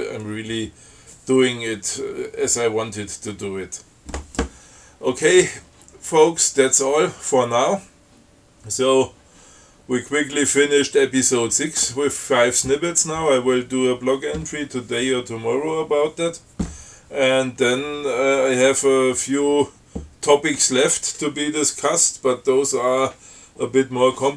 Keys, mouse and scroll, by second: 9.0 scroll up 2, 10.2 scroll up 2.